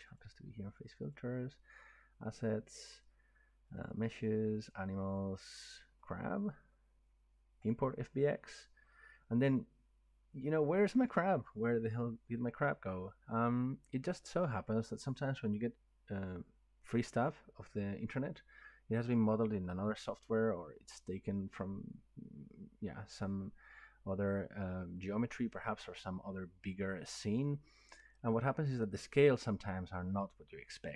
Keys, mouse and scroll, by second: 0.2 click, 1.0 click, 1.2 click, 3.8 click, 4.0 click, 4.6 click, 4.7 click, 6.1 click, 8.4 click.